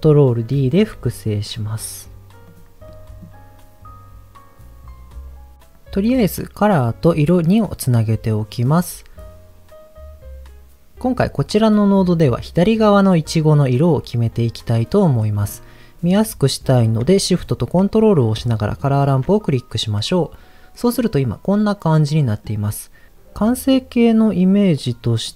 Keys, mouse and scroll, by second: 0.6 ctrl+shift+d, 2.4 click, 2.8 middle click, 3.2 scroll up 2, 6.6 click, 7.6 click, 8.8 scroll up 2, 15.0 middle click, 18.8 ctrl+shift+click, 19.5-20.7 scroll up 3, 20.9-22.4 middle drag.